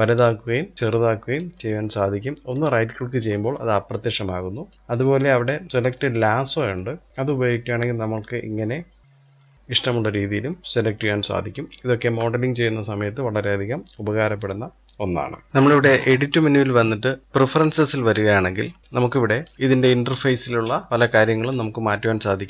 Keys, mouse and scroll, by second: 4.5 click, 4.7 click, 9.8-10.6 middle drag, 10.6-10.9 scroll up 1, 10.9-14.1 shift+middle drag, 15.5-18.3 drag.